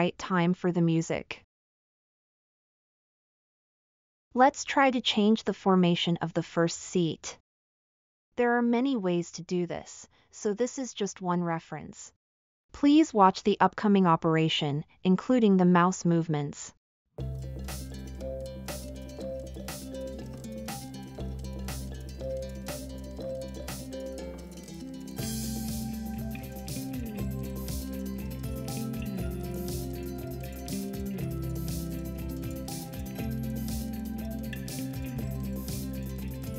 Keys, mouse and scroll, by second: 9.8 scroll up 2, 10.7 scroll up 2, 10.9 scroll down 2, 11.0 scroll up 2, 11.1 scroll down 2, 11.1-12.2 scroll up 6, 19.1 click, 19.7-20.3 drag, 25.5-26.5 drag, 26.9-27.4 drag, 30.9-31.6 drag, 31.9-32.4 shift+drag, 33.0-33.6 shift+drag.